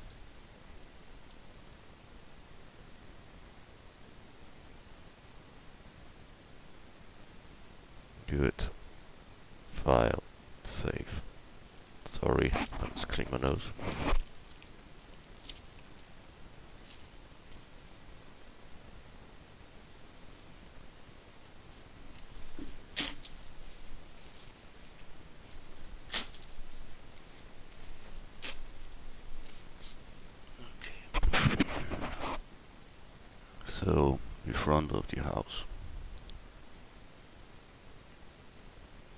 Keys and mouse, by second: 0.1 a, 1.3 l, 2.0 l, 7.0 Tab, 8.3 a.